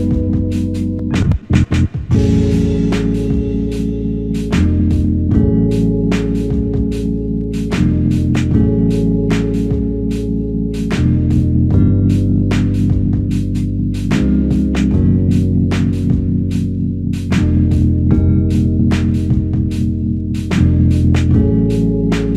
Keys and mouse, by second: 1.2 alt+click, 2.0 shift+click, 3.2 shift+click, 4.5 alt+shift+click, 7.3 f, 8.1 alt+click, 9.7 double click, 10.8 f, 11.7 double click, 14.7 shift+click, 16.1 shift+click, 19.2 shift+click, 21.1 shift+click.